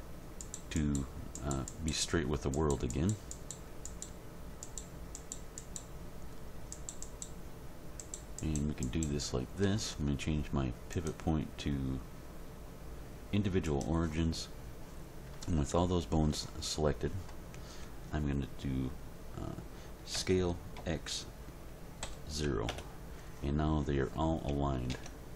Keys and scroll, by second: 20.1 s, 20.8 x, 22.0 0, 22.7 Return, 24.9 Tab.